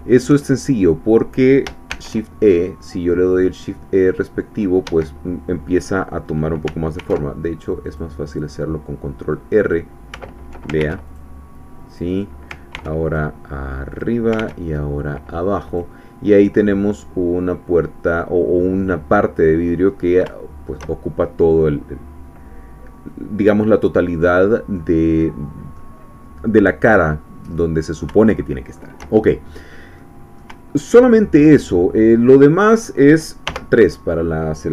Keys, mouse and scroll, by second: 0.5 shift+click, 2.0 shift+e, 4.9 Escape, 7.0 ctrl+r, 7.8 click, 9.6 click, 10.8 ctrl+r, 11.1 ctrl+click, 11.9 click, 12.8 ctrl+r, 13.0 ctrl+click, 13.9 click, 14.4 ctrl+r, 14.6 ctrl+click, 15.7 click, 16.3 scroll down 2, 16.6-19.8 middle drag, 19.8-20.2 scroll up 2, 20.3-21.3 shift+middle drag, 21.4 scroll down 2, 24.8-25.9 drag, 27.2 middle click, 27.2 scroll down 1, 27.6 click, 28.3 shift+click, 28.3 shift+middle click, 30.0-31.4 middle drag, 32.2 click, 33.4 3.